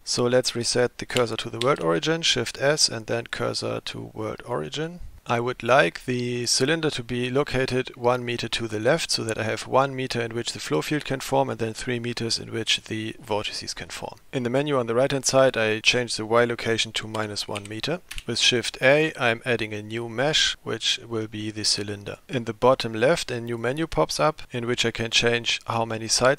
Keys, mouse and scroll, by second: 1.7 shift+s, 5.2-7.6 middle drag, 15.4-18.2 drag, 18.5 shift+a, 23.5 click, 25.6-26.3 drag.